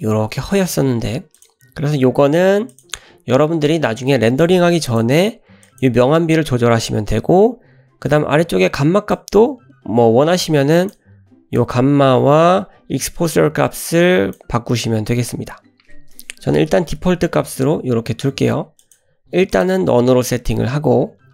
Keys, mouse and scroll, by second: 1.5-2.8 drag, 4.9-5.9 drag, 9.1-10.9 drag, 11.6-14.4 drag, 16.4 BackSpace, 17.0 BackSpace, 18.8 click.